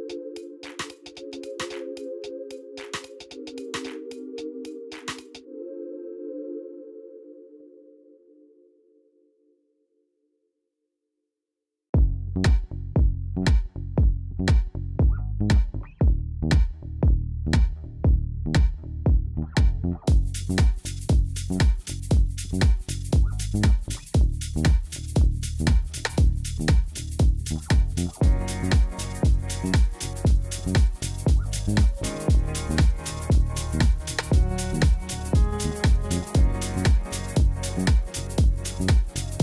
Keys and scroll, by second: 14.7 Tab, 16.5 2, 19.6 ctrl+b, 20.0 ., 20.2 0, 21.1 Return, 26.1 u, 31.3-32.9 typing, 33.6 Return.